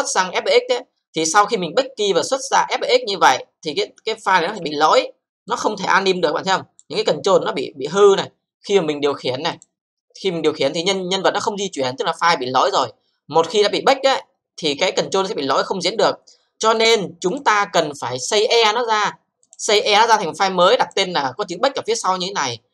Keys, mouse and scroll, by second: 2.8-4.5 scroll up 2, 4.5 click, 4.9 e, 5.5 click, 6.5-7.4 typing, 7.2-8.0 scroll up 3, 8.1 alt+middle click, 9.5 click, 10.3 click, 12.8 c, 13.4 z, 16.7 click, 17.3 click, 19.5 click, 20.8 click.